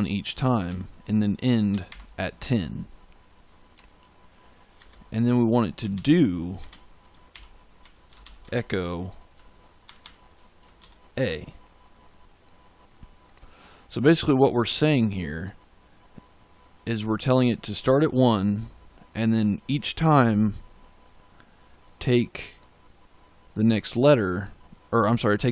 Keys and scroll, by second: 0.6-2.3 typing, 3.6 Right, 4.7-8.6 typing, 9.8 shift+5, 10.7 shift+a.